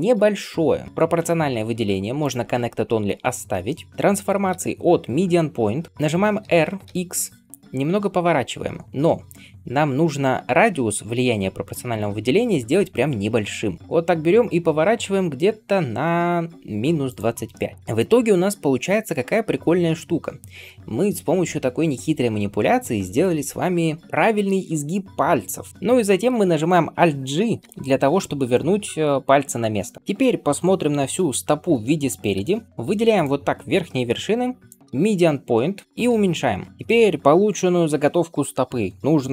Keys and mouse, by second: 0.0 click, 0.1-2.2 middle drag, 2.2-17.2 drag, 6.3 r, 17.2-35.8 middle drag, 25.7 Tab, 27.6 alt+g, 32.2 KP_1, 32.7 1, 33.1-36.7 drag, 35.8 s, 36.7-39.3 middle drag.